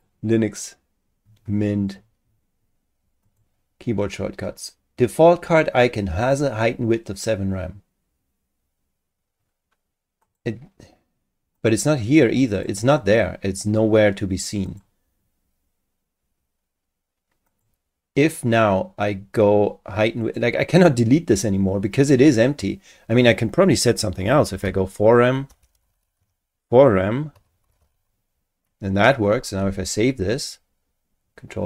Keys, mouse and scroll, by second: 3.2 click, 10.2 click, 11.6 click, 12.5 click, 14.7 click, 17.5 click, 20.2 click, 24.0-28.3 typing, 29.7 ctrl+s.